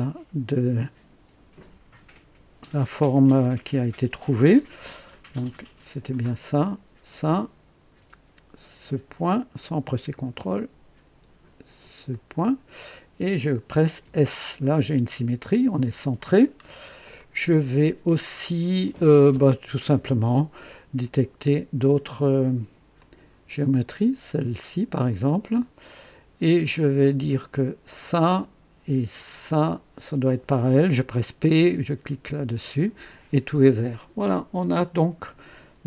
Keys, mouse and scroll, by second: 6.2 click, 10.1 click, 12.1 click, 14.0 s, 16.4-16.9 scroll down 1, 17.2 click, 17.3 right click, 22.9 click, 25.1 click, 26.0 right click, 27.9 click, 29.4 click, 32.2 p.